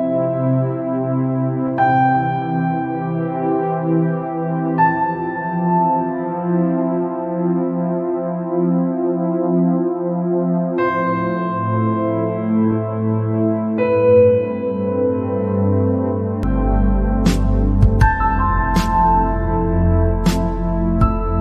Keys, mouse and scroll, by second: 2.7 scroll down 4, 3.7-6.7 drag, 6.9-7.9 scroll down 2, 8.0-13.4 drag, 14.5-16.2 drag, 16.4 scroll down 4, 17.0 scroll up 3, 17.5 click, 18.0 click, 20.8 click.